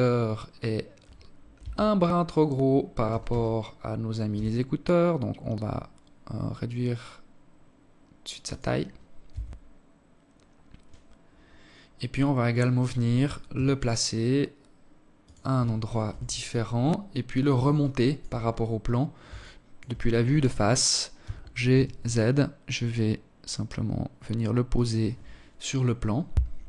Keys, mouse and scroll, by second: 0.2 Tab, 1.7 a, 1.9 a, 2.9 s, 7.5-7.9 scroll up 3, 7.9 Tab, 9.0 scroll down 1, 10.5-12.1 scroll down 2, 12.1 g, 14.7 KP_1, 15.3-15.7 scroll up 5, 15.7-16.2 scroll down 2, 16.4 alt+shift+click, 17.1 scroll up 2, 17.3 scroll down 1, 18.0 alt+shift+click, 19.8 g, 26.0 KP_0.